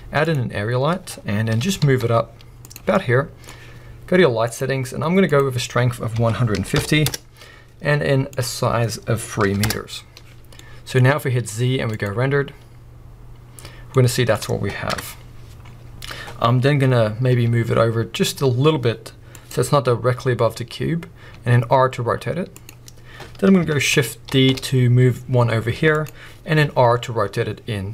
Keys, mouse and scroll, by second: 0.6 scroll down 1, 1.5 g, 3.2-4.5 middle drag, 4.5 click, 5.2-10.6 drag, 7.1 Return, 9.7 Return, 10.6-13.1 middle drag, 11.4 z, 13.6-14.0 scroll down 2, 14.0 middle click, 14.9 KP_0, 15.6-16.2 scroll up 2, 16.2-19.6 middle drag, 16.4 scroll down 1, 17.3 g, 19.6 click, 20.1 scroll up 1, 21.3 r, 22.7 click, 24.3 shift+d, 26.1 click, 26.6 r.